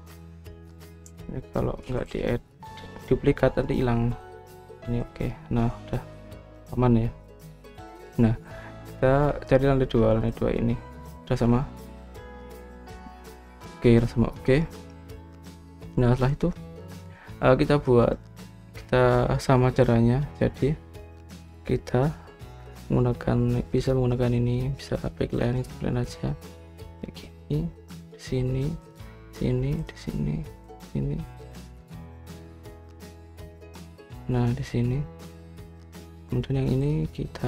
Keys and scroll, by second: 0.0-0.6 typing, 1.9-3.4 typing.